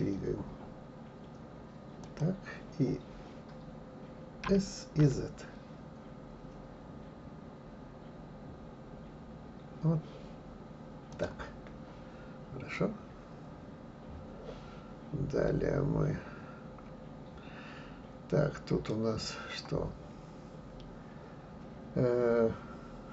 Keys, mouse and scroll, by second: 12.8-15.9 middle drag.